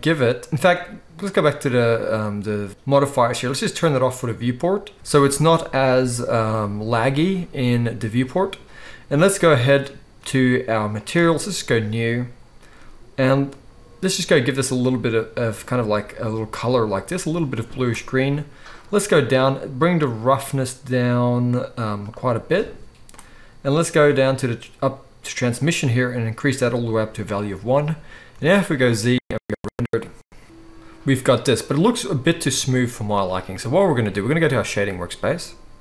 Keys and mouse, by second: 0.0-4.3 middle drag, 4.3 click, 4.4-10.9 middle drag, 10.9 click, 11.0-12.0 middle drag, 12.0-13.7 drag, 13.7-22.0 middle drag, 22.0-35.8 drag, 28.3 z, 32.4 z.